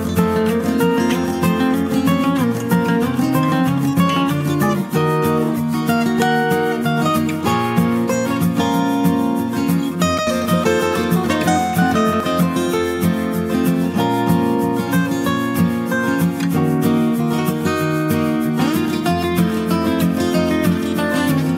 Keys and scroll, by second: 5.4 ctrl+j.